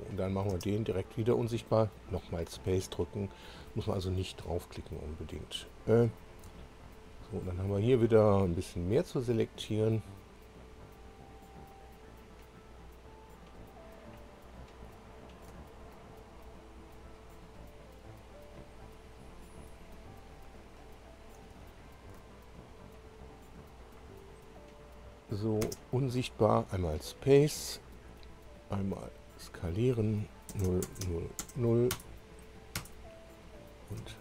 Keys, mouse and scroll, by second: 1.1 space, 2.8-3.8 shift+drag, 6.1 click, 7.5 ctrl+click, 8.4 ctrl+click, 9.7 ctrl+click, 10.5 ctrl+click, 11.5 ctrl+click, 12.6 ctrl+click, 15.1-15.5 ctrl+scroll up 4, 16.2 ctrl+click, 16.7 ctrl+click, 17.9 ctrl+click, 18.9 ctrl+click, 19.9 ctrl+click, 20.5-20.9 ctrl+scroll down 3, 21.7-22.1 ctrl+scroll up 1, 23.0 ctrl+click, 23.8 ctrl+click, 24.4 ctrl+scroll down 1, 26.2 space, 29.0 click, 30.5 0, 31.0 Tab, 31.0 0, 31.9 0, 31.9 Return.